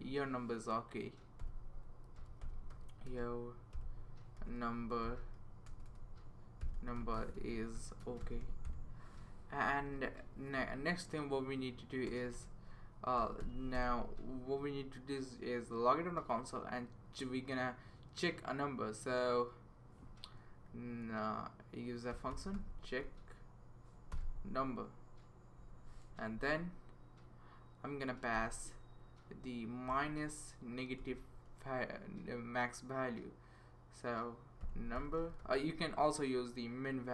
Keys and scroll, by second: 1.0-9.1 typing, 9.7 Right, 9.8 Right, 10.6 Right, 12.1 Return, 12.3 Return, 12.9-15.2 typing, 21.9-23.0 typing, 24.1 Return, 26.0 shift+9, 28.3 -, 29.9 shift+n, 31.0 u, 34.4-35.9 typing.